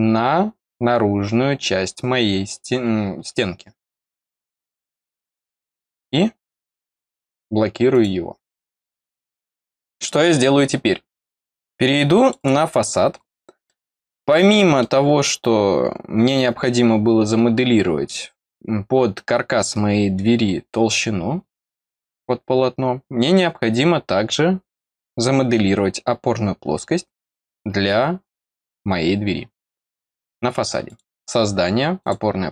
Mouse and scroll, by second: 0.0 scroll down 1, 1.1-2.4 scroll down 2, 7.9 click, 12.2 click, 12.3 click, 13.2-13.6 scroll down 1, 13.6-14.7 middle drag, 15.1 scroll down 2, 24.1 scroll up 2, 30.8 click, 31.9 click.